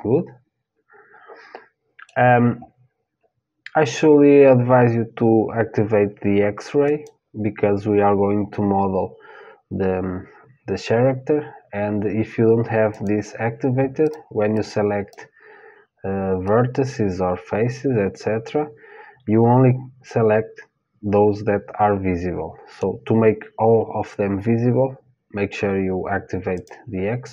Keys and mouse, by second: 6.4-11.5 drag, 12.5-16.1 drag, 16.1-18.0 middle drag, 26.2-27.3 drag, 27.1 middle click.